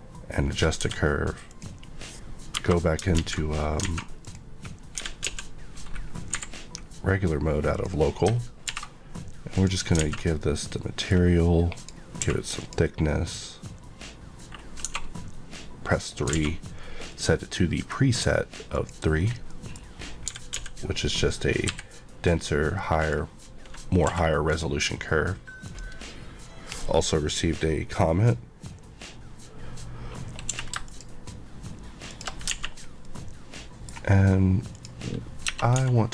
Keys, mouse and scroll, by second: 0.8 s, 1.5 click, 2.5 KP_Divide, 3.2 alt+z, 4.0 alt+a, 4.2 click, 4.9 click, 5.0 g, 6.3 y, 7.7 click, 8.6 alt+m, 9.6 click, 10.0 alt+a, 10.4 middle click, 11.7 middle click, 12.2 q, 12.5 click, 14.8 click, 14.8 2, 15.9 click, 16.3 alt+a, 17.1 middle click, 18.0 scroll up 1, 18.7 click, 19.2 scroll down 1, 19.5 middle click, 19.8 scroll up 1, 20.2 typing, 21.7 y, 23.0 click, 24.0 q, 24.4 click, 25.6 click, 30.5 q, 30.8 shift+click, 32.1 shift+click, 32.1 shift+Left, 32.4 alt+a, 32.7 scroll down 1, 33.0 middle click, 34.7 click, 35.4 click, 35.7-36.1 typing.